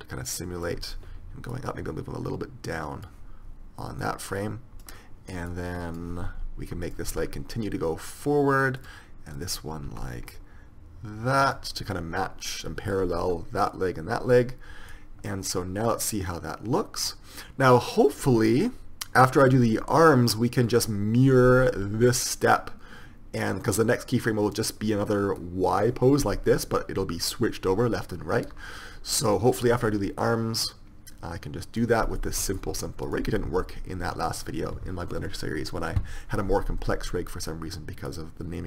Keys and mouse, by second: 7.1 right click, 7.5 r, 10.1 r, 10.6 click, 15.1-16.9 drag, 22.3-24.3 drag, 25.6-30.5 drag, 32.4-38.6 middle drag.